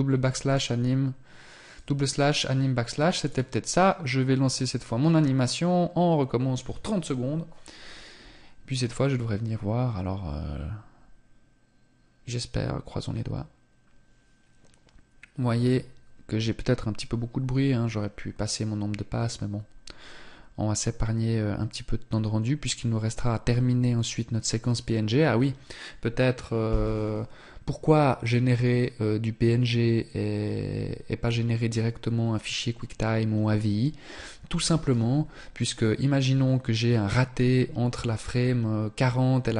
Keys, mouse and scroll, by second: 0.8 click.